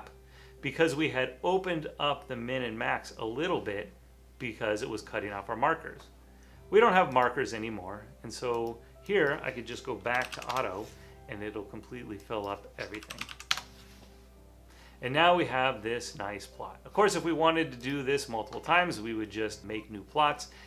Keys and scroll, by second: 9.9-11.0 typing, 12.9-14.1 typing.